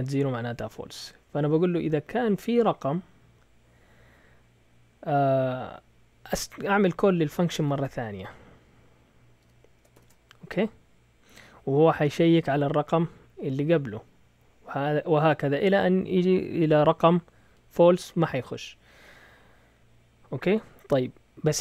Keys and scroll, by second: 7.3-8.2 typing, 9.4-9.9 typing.